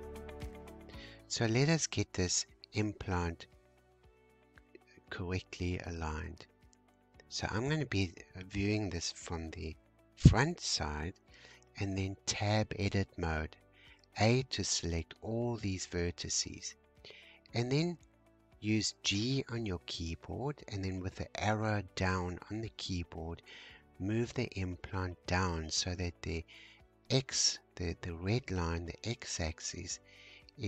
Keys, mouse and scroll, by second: 2.8-3.4 scroll up 3, 4.8 scroll down 1, 7.7 scroll down 1, 12.4 Tab, 15.4 g.